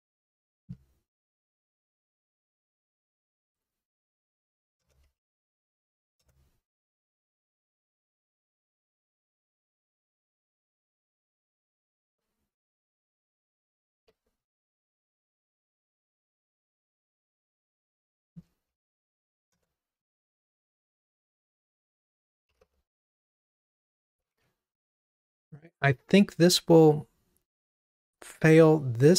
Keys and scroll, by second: 0.3 super+c, 6.3 Return, 7.3 super+v, 9.4 alt+Up, 11.1 alt+Up, 11.3 alt+super+l, 14.0 alt+super+l, 14.2 super+d, 19.7 Return, 27.6 ctrl+r.